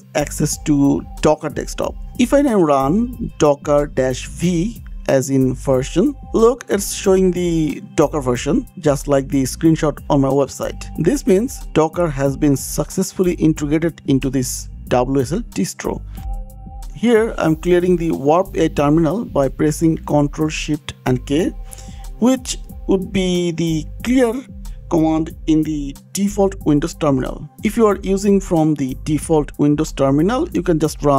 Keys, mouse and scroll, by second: 1.8 click, 3.6-6.4 typing, 7.4 click, 9.1 click, 12.5 Escape, 13.5 click, 17.0 click, 20.3 click, 24.2 ctrl+shift+k, 30.7 click.